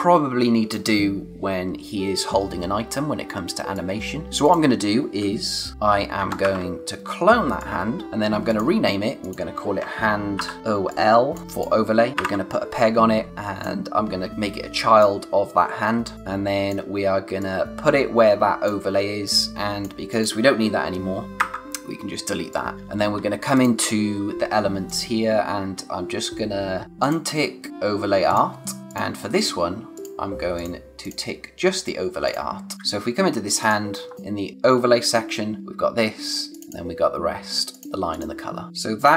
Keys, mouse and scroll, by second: 3.7 click, 6.2 ctrl+c, 6.4 ctrl+v, 7.5 click, 8.0 z, 8.4 click, 10.1-11.1 typing, 10.9 click, 12.3 p, 13.3 click, 17.4 click, 22.7 space, 22.9-23.5 scroll up 1, 23.5 click, 27.0 click, 34.1 scroll down 1, 34.1 click.